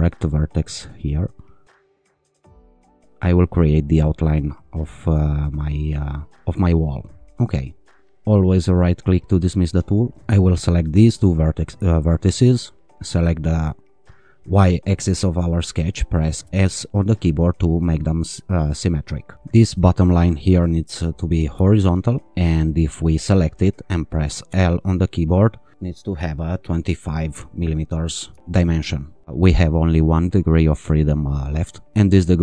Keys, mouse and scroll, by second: 0.0 click, 2.1 click, 2.8 click, 4.3 click, 6.4 click, 8.3 click, 10.2 click, 11.4 click, 13.2 click, 16.4 s, 20.3 click, 21.5 h, 23.0 click, 24.5 l, 28.3 2, 28.4 Return.